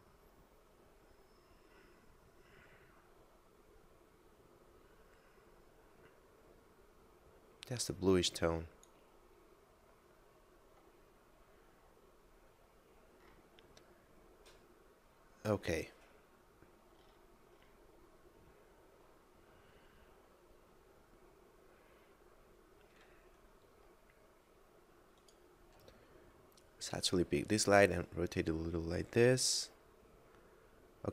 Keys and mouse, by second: 11.2 middle click, 18.5 middle click, 21.8 middle click, 25.0 right click, 26.8 r, 26.9 z.